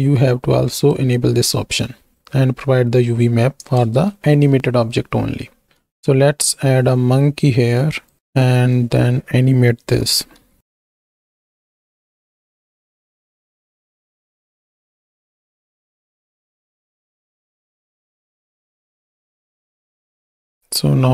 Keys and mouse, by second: 0.9-2.1 drag, 3.8 ctrl+space, 4.6 shift+drag, 5.6 shift+a, 9.9-11.8 typing, 12.7 ctrl+space, 13.2-13.9 drag, 14.1-15.7 drag, 16.2 i, 16.9 shift+click, 17.3-17.9 drag, 18.2 g, 18.3 x, 19.1 r, 20.3 shift+i.